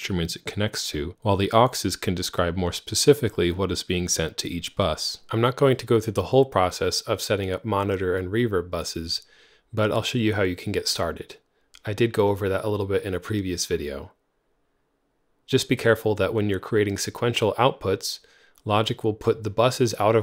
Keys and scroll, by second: 9.1-10.2 typing, 12.5-16.0 typing, 16.1 Return.